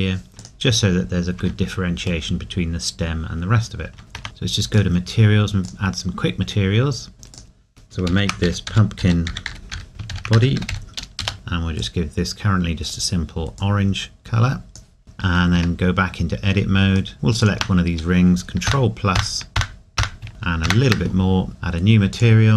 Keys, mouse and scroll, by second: 0.9 scroll down 1, 1.4 Tab, 2.3 middle click, 7.3 click, 10.0 typing, 15.6 Tab, 17.1-17.4 scroll up 1, 18.7 ctrl+KP_Add, 20.7 ctrl+KP_Add.